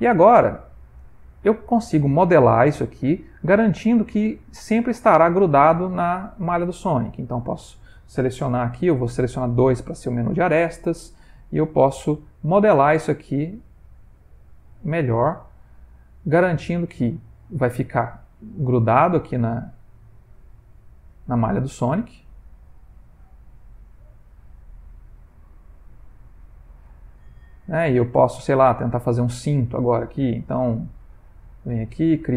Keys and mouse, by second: 0.1 middle click, 1.1 ctrl+middle click, 2.3 middle click, 5.7 Tab, 6.2 middle click, 7.1 click, 9.0 2, 9.4 click, 10.0 g, 11.4 click, 11.8 g, 13.2 click, 13.5 g, 14.6 click, 14.8 g, 15.9 click, 16.1 g, 17.6 middle click, 17.9 middle click, 18.4 shift+middle click, 18.5 shift+middle click, 19.0 middle click, 19.6 middle click, 21.2 alt+click, 21.9 g, 24.0 middle click, 25.1 click, 25.4 g, 26.9 middle click, 27.8 middle click, 28.7 shift+middle click, 28.8 shift+middle click, 29.3 middle click, 30.6 ctrl+r.